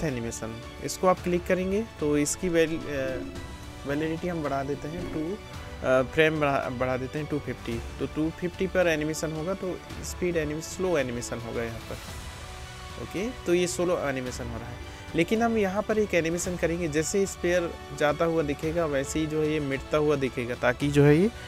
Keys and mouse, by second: 3.6 BackSpace, 7.4-10.6 drag, 8.5 space, 10.6 space, 13.0-14.9 drag, 13.0 space, 14.9-21.4 middle drag.